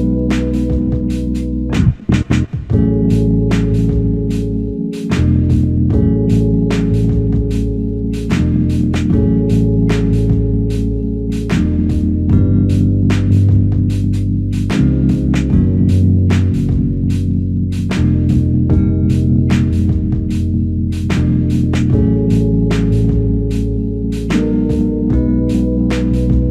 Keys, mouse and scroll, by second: 1.3 ctrl+click, 7.8 ctrl+alt+click, 8.4 alt+click, 9.4 alt+shift+click, 10.0 alt+click, 14.1 ctrl+click, 15.5 alt+click, 17.5 ctrl+click, 19.2 alt+click, 21.0 ctrl+click, 23.1 ctrl+alt+click, 23.7 alt+click, 25.7 ctrl+alt+click.